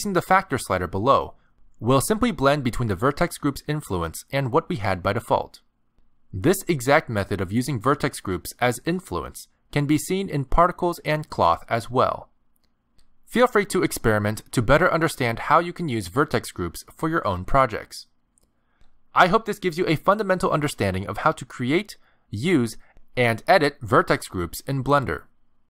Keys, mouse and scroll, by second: 1.0 click, 5.9 click, 6.5 click, 10.6 ctrl+Tab, 12.3 click, 16.3 ctrl+Tab.